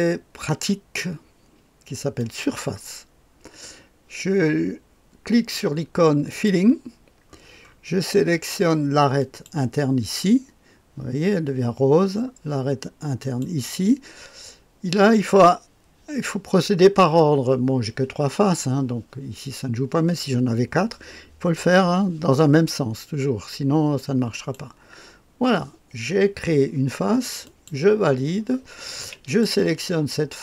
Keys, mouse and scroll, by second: 2.2 click, 6.3 click, 9.2 click, 13.2 click, 24.3 click, 27.4 click, 29.2 click.